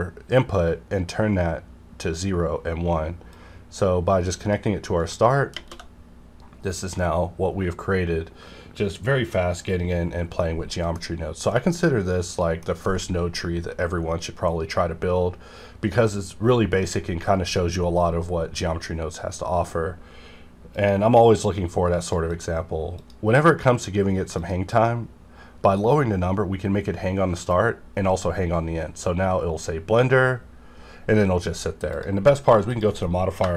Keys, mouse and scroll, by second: 3.3 KP_Enter, 3.3-5.5 drag, 5.5 shift+_, 9.7 scroll down 1, 10.4 middle click, 11.0 scroll up 1, 11.5-15.0 middle drag, 19.1 scroll up 1, 20.7 click, 22.3 click, 31.9 click.